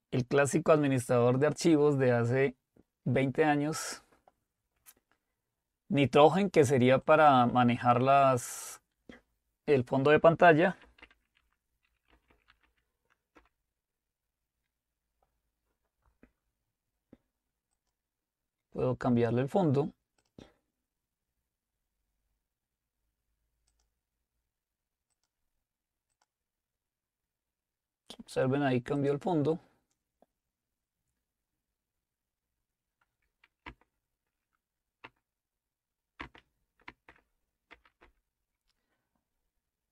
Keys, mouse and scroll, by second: 7.1-10.2 drag, 10.7-13.1 typing, 13.4 Return, 17.8 click, 20.3 click, 23.7 click, 25.1 click, 29.1 click, 35.0 shift+Up, 36.2-38.3 typing.